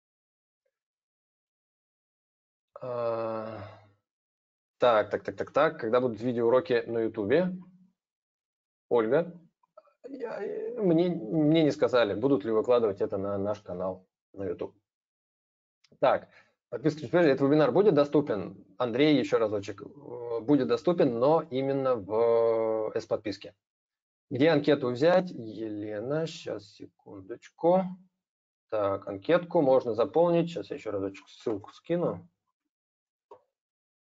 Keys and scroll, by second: 31.2 ctrl+c, 32.8 ctrl+v.